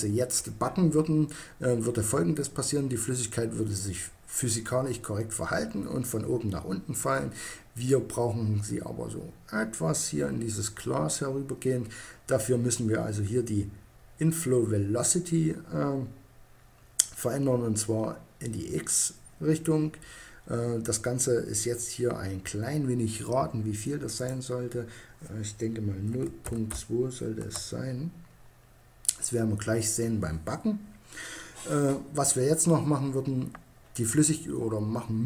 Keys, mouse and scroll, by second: 23.3-24.9 drag.